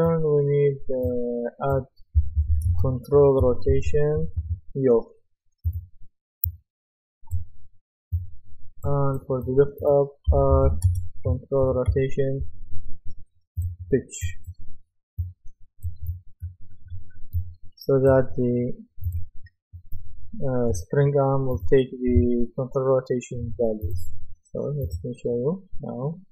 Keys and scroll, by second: 1.9-5.0 typing, 10.0-12.4 typing.